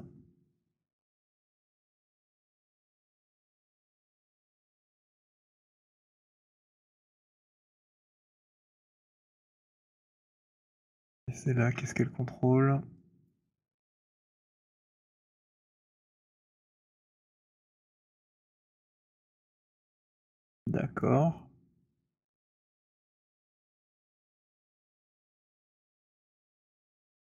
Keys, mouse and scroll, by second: 1.1 click, 5.0 click, 6.9 click, 8.6 alt+click, 9.7 click, 10.7 click, 11.8 z, 13.1 click, 17.7 click, 18.4 click, 20.0 alt+click, 20.7 alt+click, 20.9 alt+middle click, 21.3 alt+right click, 22.5 alt+click, 24.2 alt+click, 25.2-26.2 scroll.